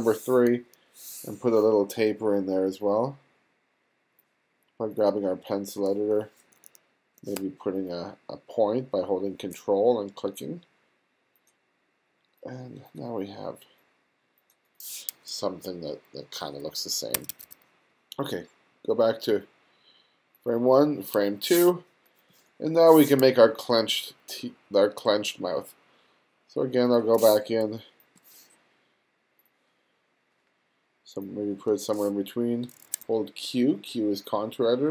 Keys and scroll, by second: 0.5 g, 17.2 1, 22.3 space, 27.5 space, 33.0 q.